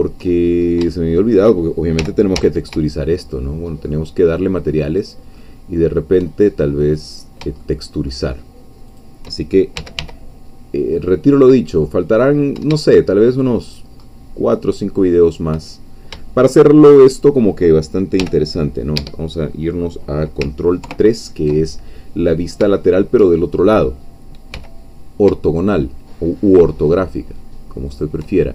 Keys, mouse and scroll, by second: 0.4-0.9 shift+scroll up 4, 0.9 shift+middle click, 2.0 g, 2.4 z, 5.0 shift+click, 5.4 shift+middle click, 6.9 click, 7.7 shift+middle click, 9.0 shift+click, 9.5-10.5 typing, 13.7 shift+click, 14.1-15.9 shift+middle drag, 15.9 shift+scroll down 2, 16.3 shift+middle click, 17.1 click, 18.2 g, 19.0 Escape, 20.8 ctrl+3, 22.2-22.6 scroll up 3, 22.8 shift+middle click, 23.4-23.8 shift+scroll up 2, 24.5 g, 27.9 shift+click.